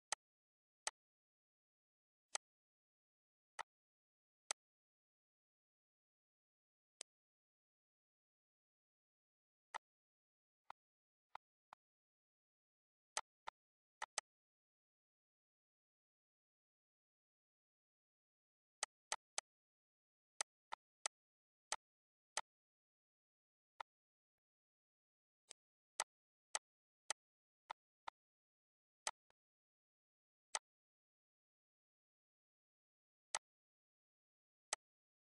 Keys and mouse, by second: 4.7 click, 7.2 click, 8.6 ctrl+d, 10.0 click, 11.0 click, 11.6 click, 13.4 click, 14.9 click, 18.5 ctrl+g, 20.6 click, 21.0 shift+click, 21.9 shift+click, 22.6 shift+click, 23.2 ctrl+g, 24.0 click, 25.1 ctrl+g, 25.7 click, 26.2 shift+click, 27.9 shift+click, 28.8 ctrl+g, 29.3 click, 30.4 ctrl+g, 30.7 click, 31.2 ctrl+s, 33.6 click, 34.9 click.